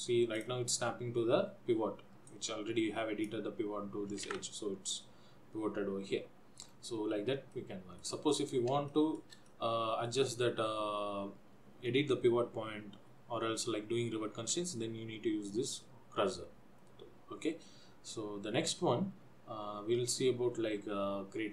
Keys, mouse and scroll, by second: 0.7 click, 2.5 click, 4.5 ctrl+z, 6.8-7.5 scroll down 2, 7.7 middle click, 8.5-8.9 scroll up 4, 9.1 shift+middle click, 9.7 middle click.